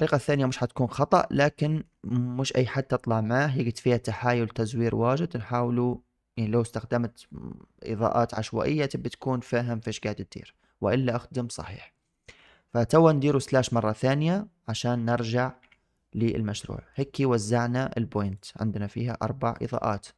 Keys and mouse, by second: 0.3-1.0 drag, 1.2-1.7 shift+drag, 12.0 click, 14.9 KP_Divide, 16.5 shift+drag, 18.2 click, 19.4 click.